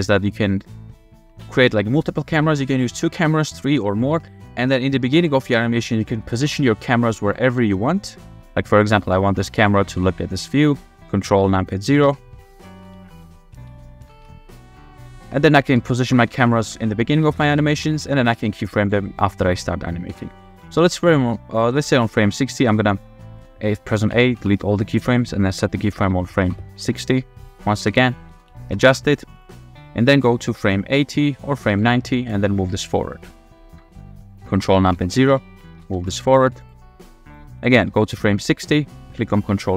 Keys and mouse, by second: 0.4 middle click, 1.0 middle click, 1.4 shift+drag, 1.8-2.3 drag, 4.0 shift+click, 4.9-5.3 drag, 6.4 shift+d, 7.5-9.9 typing, 8.8 click, 10.6 shift+click, 12.1 ctrl+KP_0, 12.8-18.4 typing, 18.8-19.4 drag, 20.1 f, 20.9 drag, 24.1 a, 24.3 x, 26.6 i, 27.8 KP_0, 28.3 shift+f, 28.8 w, 29.1 w, 29.4 click, 30.2 click, 31.7 click, 32.7-34.1 drag, 35.0 ctrl+KP_0, 35.7 shift+f, 36.2 w, 36.5 w, 37.3 click, 38.1-38.6 drag.